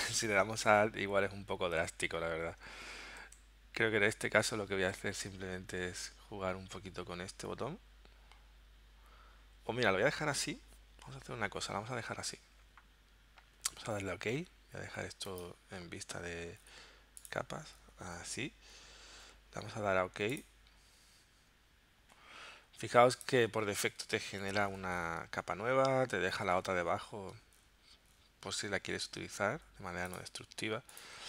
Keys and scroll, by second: 3.2 super+z, 29.5 z.